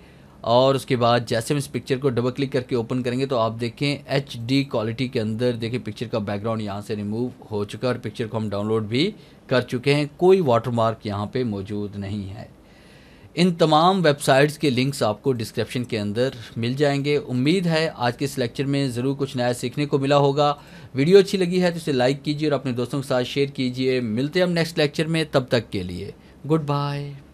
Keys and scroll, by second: 4.6 alt+a, 13.8 alt+a.